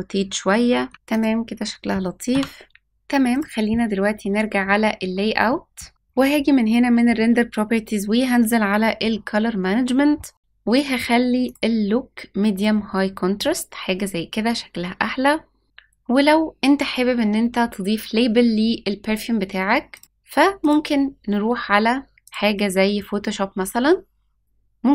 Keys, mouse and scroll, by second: 4.3 click, 4.3-7.0 scroll down 7, 7.0 click, 7.6-10.1 scroll down 1, 10.1 scroll down 1, 10.4-11.2 drag, 19.5-20.6 drag.